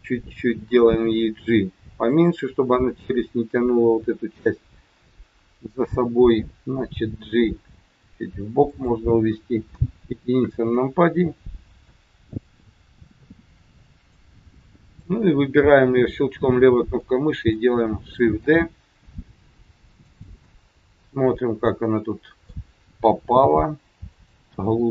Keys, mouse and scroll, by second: 1.1 g, 6.9 g, 9.7 KP_1, 11.8 click, 17.0 middle click, 18.3 shift+d, 20.4 middle click, 23.4 g, 24.5 middle click.